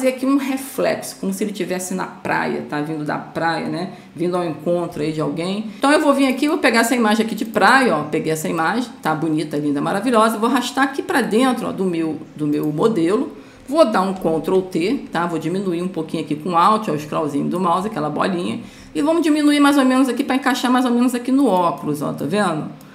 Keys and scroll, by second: 14.5 ctrl+t.